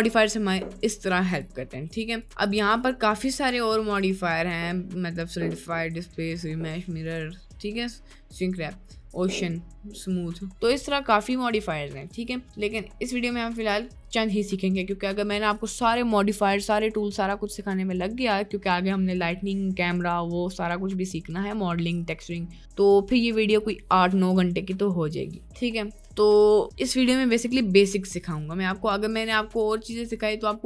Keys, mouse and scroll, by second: 1.2 click, 2.1-12.7 drag, 27.0 middle click.